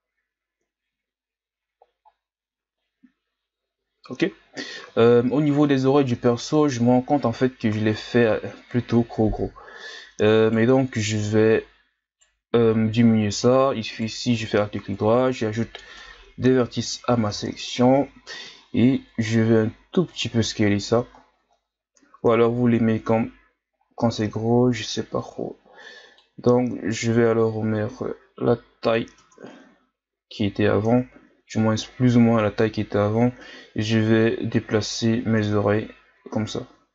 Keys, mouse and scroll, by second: 0.9-2.1 scroll up 8, 2.1-4.0 scroll down 4, 4.0-5.0 scroll up 4, 5.1-6.2 shift+scroll up 4, 6.2 Tab, 6.6-8.0 ctrl+scroll up 4, 8.0 right click, 11.1 right click, 13.9 alt+right click, 15.0 ctrl+KP_Add, 15.2 ctrl+KP_Add, 15.8 ctrl+KP_Add, 16.8 ctrl+KP_Add, 17.7 ctrl+KP_Subtract, 18.9 s, 21.1-21.9 scroll down 7, 21.9-22.2 scroll up 1, 22.2 Tab, 22.7-23.7 scroll down 1, 23.7-24.3 scroll up 2, 24.3 Tab, 25.2-26.4 drag, 26.4 s, 29.2 Tab, 29.5-30.1 scroll down 1, 30.1-30.9 scroll up 2, 30.9 Tab, 31.6-35.4 drag, 35.4 Tab, 36.1-36.9 scroll down 1.